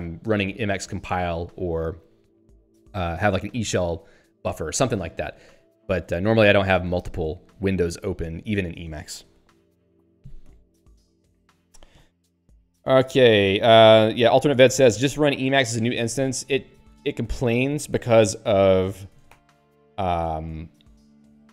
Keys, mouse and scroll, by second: 4.5 ctrl+alt+', 7.6 click, 7.8 click, 16.6 click, 16.8 click, 17.2 click, 17.5 q, 18.3 click, 21.3 ctrl+s.